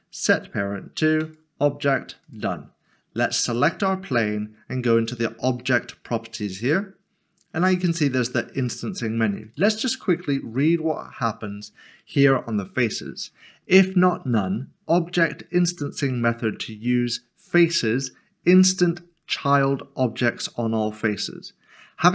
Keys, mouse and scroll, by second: 1.2 click, 6.6 click, 9.4 click.